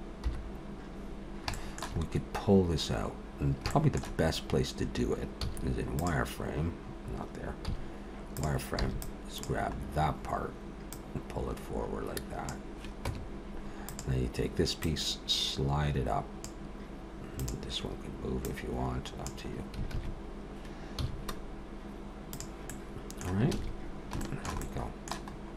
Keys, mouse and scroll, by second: 0.3 KP_7, 1.2-1.5 scroll down 2, 1.5 shift+middle click, 2.1-3.3 scroll up 2, 3.3-3.7 scroll down 1, 3.7 shift+middle click, 5.4 z, 7.7 z, 8.8 b, 9.7-10.7 scroll up 2, 10.7 scroll up 1, 10.9 click, 13.1 Tab, 13.9 click, 14.8 click, 17.4 click, 18.4 click, 19.9 alt+a, 21.0 z, 22.7 middle click, 23.6 alt+a, 23.8-24.2 scroll down 2, 24.2 shift+middle click, 24.6 middle click, 25.3-25.5 scroll up 2.